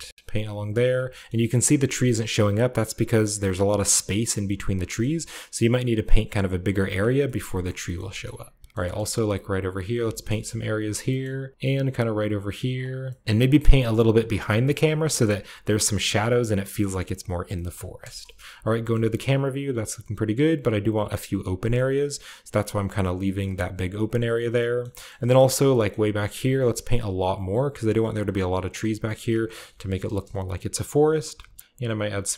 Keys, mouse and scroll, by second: 2.2-2.6 shift+scroll down 1, 4.5 click, 4.9-6.8 middle drag, 6.8-7.8 drag, 6.9-8.8 scroll down 1, 7.1-8.7 middle drag, 8.8 middle click, 9.8 shift+click, 9.8-10.8 shift+scroll up 2, 10.2 KP_0, 10.3 shift+click, 10.4 shift+middle click, 10.9-12.1 shift+middle drag, 12.2 middle click, 12.8-13.2 scroll down 1, 12.8 click, 13.2 shift+middle click, 13.3 shift+click, 13.3 shift+middle click, 13.4 shift+click, 13.9 shift+middle click, 14.0 shift+click, 14.1 shift+middle click, 14.2 shift+click, 14.3 shift+middle click, 14.4 shift+click, 14.4 shift+middle click, 14.5-17.5 shift+drag, 14.6-16.1 shift+middle drag, 16.1-17.6 scroll down 1, 16.3 middle click, 17.0-18.1 middle drag, 17.9 click, 17.9 KP_0, 18.1 click, 18.6 shift+middle click, 18.7-20.0 shift+scroll up 1, 18.8-20.0 shift+middle drag, 20.0-20.6 scroll up 1, 21.6-23.0 shift+middle drag, 23.3-25.7 shift+middle drag, 23.6 click, 24.1 shift+click, 25.4-25.7 scroll down 1, 25.7-26.6 scroll up 1, 25.8 shift+middle click, 26.1-27.7 shift+drag, 26.6-27.1 scroll down 1, 26.7 shift+middle click, 26.9 shift+middle click, 27.0 shift+middle click, 27.1-27.7 scroll up 2, 27.3 middle click, 27.9 click, 28.0 click, 28.3 click, 28.7 click, 28.9 click, 29.2 click, 30.1 KP_0, 30.2 click, 31.3 KP_0, 31.6-32.3 shift+middle drag, 31.6-32.3 shift+scroll down 1.